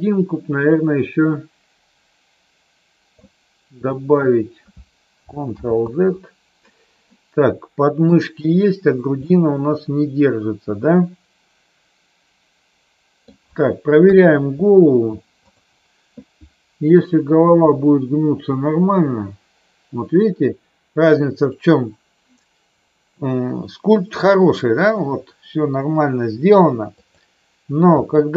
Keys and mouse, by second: 5.5 ctrl+z, 7.1 middle click, 9.2-13.2 middle drag, 14.0 KP_3, 15.5 click, 17.5 r, 27.0 click, 28.0 r.